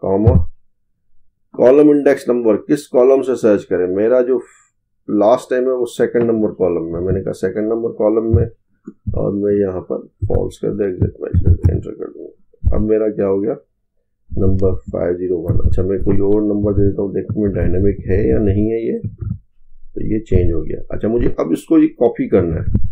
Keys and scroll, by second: 17.4 ctrl+c, 19.1 ctrl+v, 22.5 ctrl+c.